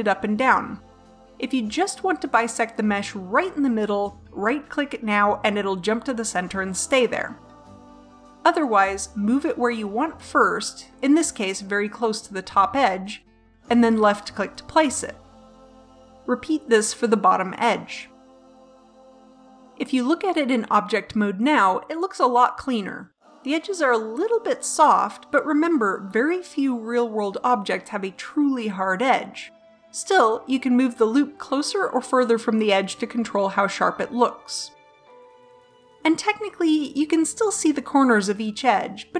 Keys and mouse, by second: 7.8 ctrl+z, 9.7 ctrl+r, 16.0 ctrl+r, 18.7 Tab, 23.4 middle click, 26.1-27.4 middle drag, 28.2-30.2 middle drag, 32.6 middle click, 33.4 KP_7, 35.8 middle click, 36.1 a.